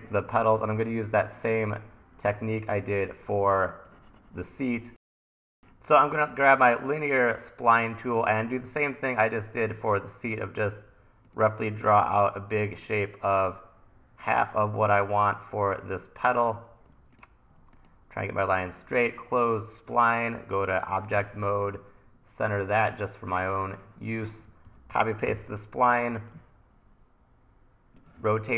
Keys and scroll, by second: 2.3 1, 11.8 super+z, 12.6 super+z, 17.2 super+z, 17.6 super+z, 21.2 v, 24.5 super+c, 24.7 super+v, 25.3 r, 28.2 e.